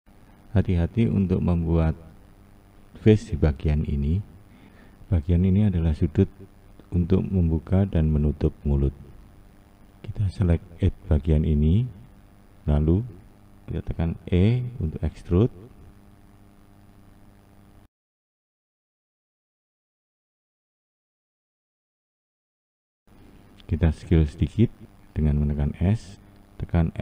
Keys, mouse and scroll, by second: 4.2 1, 4.9 click, 5.7 click, 7.2 click, 9.7 2, 11.0 click, 15.5 e, 23.0 click, 25.6 s.